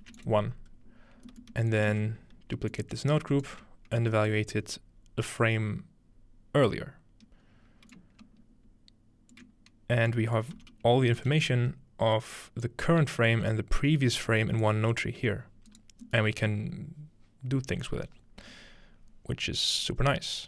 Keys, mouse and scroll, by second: 0.0 1, 0.2 click, 1.8 shift+click, 1.9 shift+d, 2.1 shift+click, 3.0-4.1 alt+drag, 3.5 middle click, 3.5 right click, 4.1-5.9 scroll down 2, 7.4-9.4 scroll up 2, 7.9-9.5 drag, 10.1 click, 10.6 g, 11.2 ctrl+click, 11.5 drag, 12.8 ctrl+click, 14.7-15.2 drag, 15.2 g.